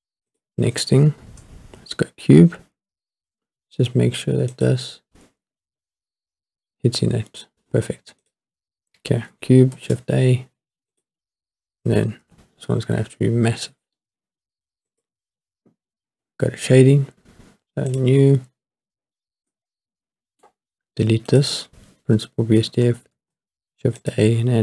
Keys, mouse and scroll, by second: 0.4 click, 4.5 click, 5.7-6.8 scroll up 3, 6.8 scroll down 1, 6.9-7.6 scroll down 1, 8.2 click, 9.7 shift+a, 12.2 s, 14.9 click, 17.9 click, 18.7-19.5 scroll up 4, 19.5-20.4 middle drag, 21.3 click, 22.2 Delete, 23.1 shift+a.